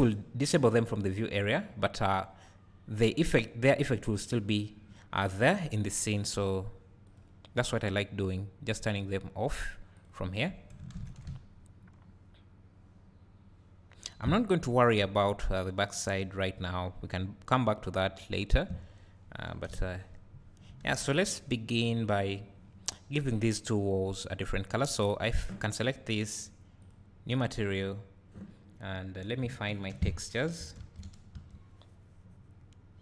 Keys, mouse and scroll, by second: 11.2 `, 13.4 `, 13.8 `, 14.7 scroll up 1, 15.2 click, 15.5-17.0 drag, 19.1-19.7 scroll up 2, 19.7 KP_0, 19.9-25.2 drag, 20.4-21.2 scroll up 2, 21.2-22.9 scroll down 2, 22.9-24.0 scroll down 1, 24.0-25.2 scroll down 1, 27.0-33.0 drag.